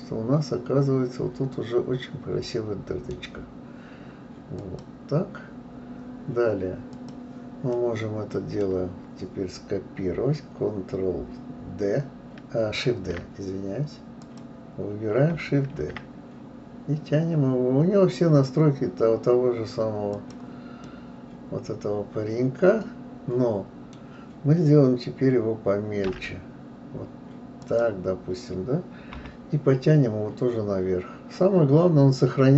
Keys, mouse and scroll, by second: 0.0-2.3 middle drag, 4.6 click, 6.9 click, 7.7-8.8 middle drag, 8.8-11.4 scroll down 1, 11.4-11.9 scroll down 1, 12.9 shift+d, 14.2 click, 15.7 shift+d, 20.8-23.9 middle drag, 26.1 s, 29.1 KP_3.